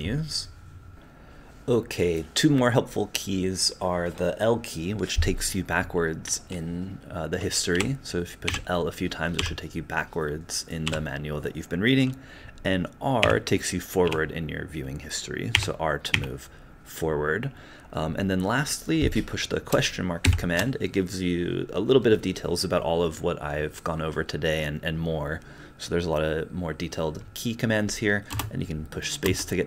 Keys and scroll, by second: 0.9 space, 7.7 l, 8.5 l, 9.4 l, 10.9 l, 13.2 r, 14.0 r, 15.5 r, 16.1 r.